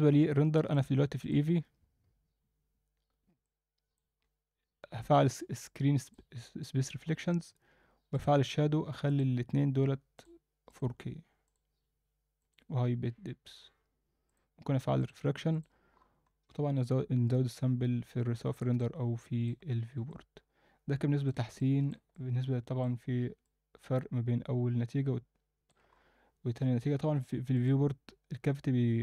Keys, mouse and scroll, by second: 0.7-1.5 drag, 3.4 click, 4.1-6.1 scroll down 2, 6.1 click, 7.1 scroll down 1, 8.1 drag, 8.4-9.0 scroll down 1, 9.0 scroll down 1, 9.1-10.4 drag, 10.7-11.6 drag, 13.6-14.3 scroll up 1, 14.3 click, 15.0 click, 15.5 click, 15.9-16.2 scroll up 1, 16.6-18.3 scroll up 2, 18.5 scroll up 2, 18.8-19.5 middle drag, 19.7 scroll down 1, 20.1-21.3 middle drag, 21.6-21.9 ctrl+alt+middle drag, 22.1-22.8 alt+middle drag, 23.4-25.7 alt+middle drag, 25.9-26.4 scroll up 2, 26.4-27.5 scroll down 2, 27.5-28.9 drag.